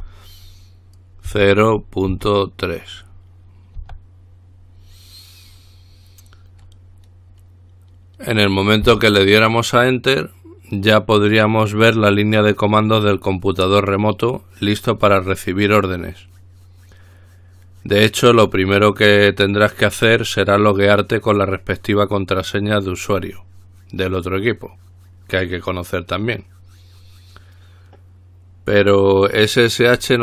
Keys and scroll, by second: 0.0-0.1 typing, 1.5-2.3 typing, 4.0 typing, 9.3 Return.